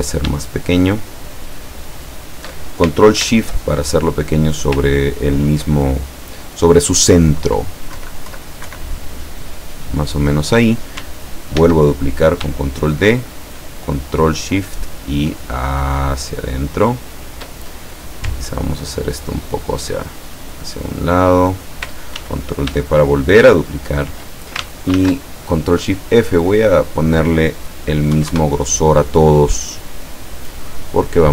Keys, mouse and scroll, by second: 0.5-2.2 ctrl+shift+drag, 5.0 ctrl+scroll up 2, 5.8 ctrl+click, 6.3 ctrl+click, 8.0 Left, 8.7 Right, 11.6 ctrl+d, 14.4-17.6 ctrl+shift+drag, 18.6-21.8 ctrl+drag, 22.2 ctrl+d, 23.1-24.2 ctrl+shift+drag, 25.0 ctrl+shift+f, 26.3 click, 28.2 KP_1, 28.4 KP_Enter, 30.2 click.